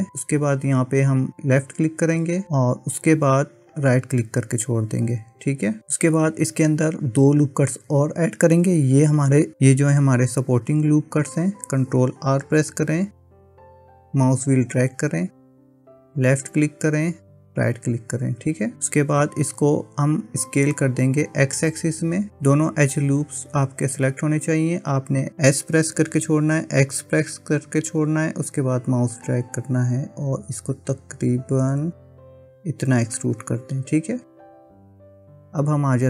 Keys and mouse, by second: 13.1 ctrl+r, 25.8 s.